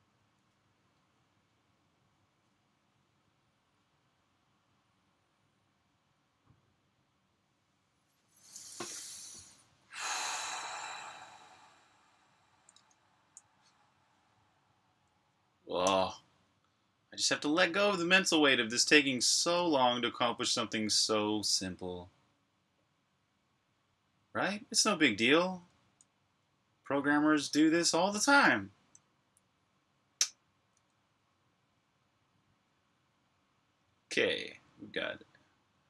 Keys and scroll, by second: 12.5 super+Tab.